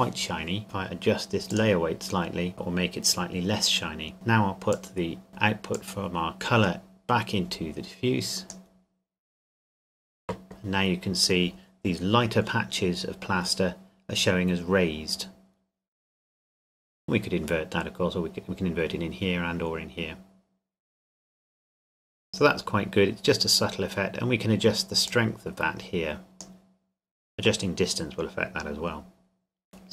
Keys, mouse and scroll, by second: 1.5 click, 4.7 click, 15.3-16.3 scroll down 1, 16.3 scroll up 1, 16.5 scroll down 1, 20.2 scroll down 1, 25.1 click, 29.3 scroll down 1, 29.7 click.